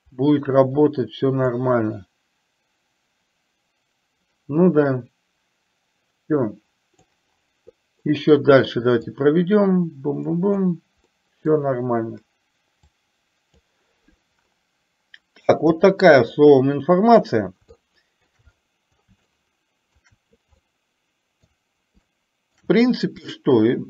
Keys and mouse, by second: 1.5-7.2 drag, 8.2 middle click, 9.2-10.7 drag, 11.2-11.5 middle drag, 12.9 click, 17.8-18.4 shift+middle drag, 19.4 shift+middle click, 20.7-21.4 middle drag, 22.2-22.7 shift+middle drag, 23.4-23.8 shift+middle drag.